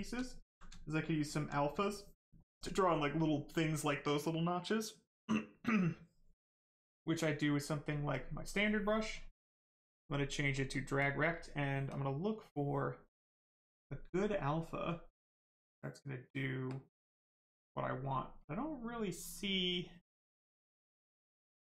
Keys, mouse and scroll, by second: 0.2 alt+right click, 10.5 click.